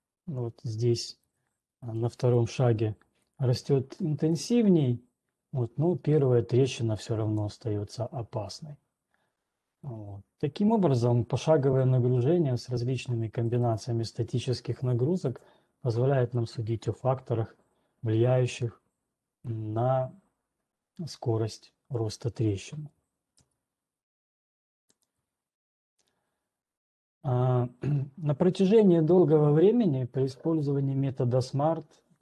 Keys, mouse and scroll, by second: 0.3-1.8 scroll, 1.8 ctrl+2, 1.8-2.3 scroll, 2.3-2.8 scroll down 6, 9.3 click, 9.3-9.8 ctrl+scroll, 9.3 typing, 13.8 right click, 14.3 right click, 22.8 right click, 23.3 alt+Tab, 25.4 alt+click, 26.1 click, 27.4 scroll, 28.8-30.2 scroll.